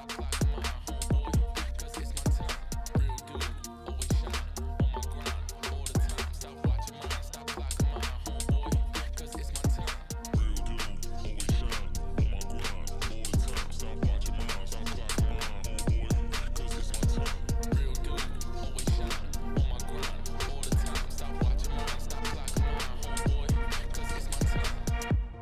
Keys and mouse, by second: 0.2 Tab, 0.5 3, 3.5 i, 5.9 z, 6.6 x, 7.7 2, 8.3 alt+click, 9.2 f, 9.8 alt+click, 10.7 f, 11.0 z, 11.6 middle click, 12.1 Tab, 13.0 KP_1, 13.8-14.1 shift+middle drag, 14.8 Tab, 15.4 3, 15.5 click, 16.0 shift+s, 16.5 Tab, 18.0 shift+a, 19.5 drag, 20.6 click, 21.9 r, 23.4 KP_1, 24.3 Tab, 24.5 1, 24.8 s.